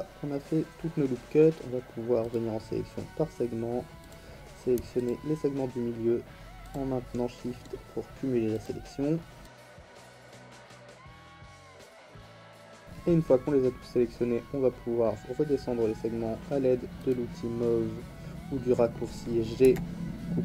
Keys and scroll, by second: 9.6 ctrl+z, 19.6 g.